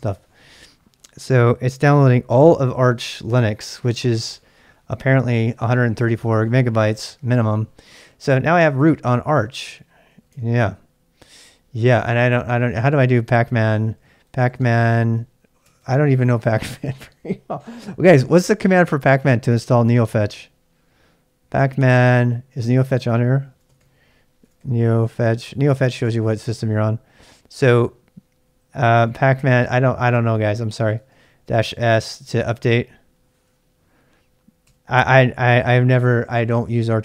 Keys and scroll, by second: 8.8-10.6 typing, 12.7-15.0 typing, 15.6 Tab, 15.8 Tab, 17.1 typing, 22.6-25.9 typing, 28.7-31.9 typing, 34.4-35.1 typing, 36.9-37.0 typing.